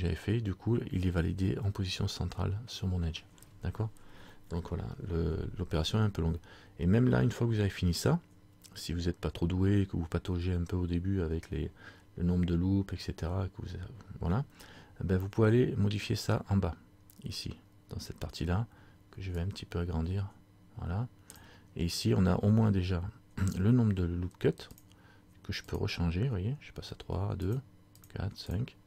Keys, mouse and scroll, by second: 19.5 click, 24.9-28.8 click.